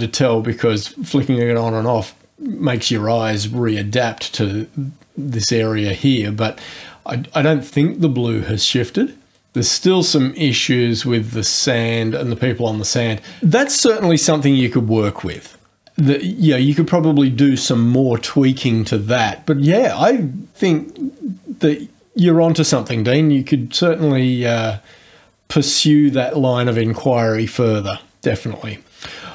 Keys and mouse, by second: 7.6 click, 9.5 click.